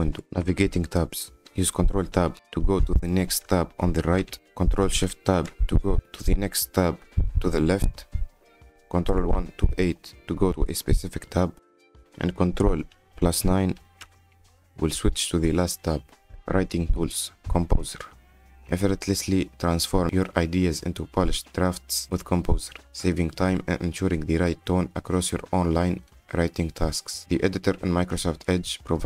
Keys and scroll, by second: 3.9 ctrl+Tab, 7.1 ctrl+shift+Tab, 9.1 ctrl+1, 9.7 2, 11.3 3, 11.8 4, 14.6 ctrl+9, 17.4 F10, 18.5-19.7 typing, 27.0-28.1 typing.